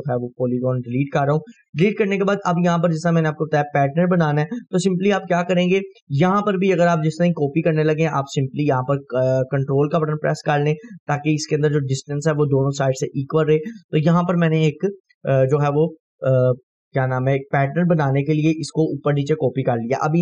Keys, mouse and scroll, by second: 0.5 click, 1.0 Delete, 1.5-2.3 scroll up 2, 2.3-3.0 scroll up 1, 3.3-3.9 drag, 4.8-5.8 drag, 7.6-14.1 ctrl+drag, 13.5 ctrl+right click, 14.3 scroll down 1, 15.4-16.4 drag, 19.9 scroll down 1.